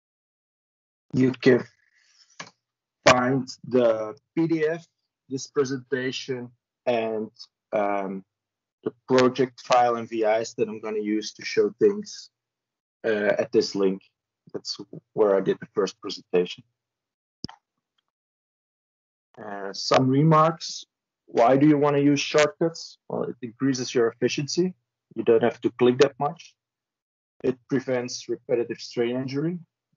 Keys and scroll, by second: 1.1 ctrl+v, 2.1 Return.